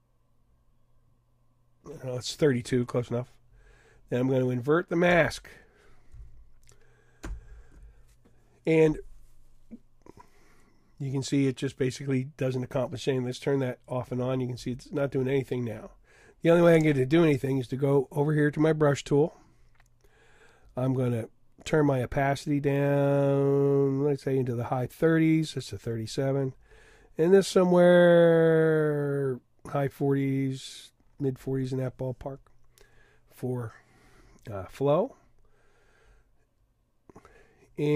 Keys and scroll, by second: 7.2 super+i.